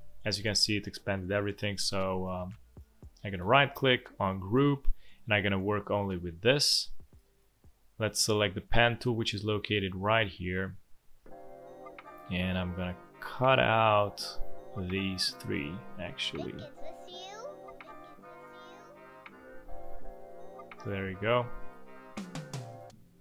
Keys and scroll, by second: 6.8 space, 17.6 v, 19.3 shift+m, 21.1 v.